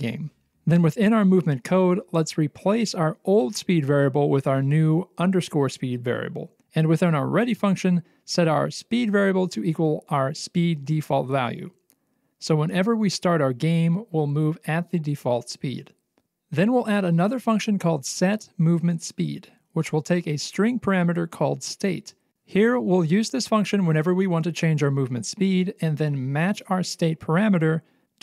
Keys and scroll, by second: 5.5 ctrl+v, 6.0 ctrl+v, 9.0 ctrl+c, 9.2 Return, 9.3 ctrl+v, 9.3-10.2 typing.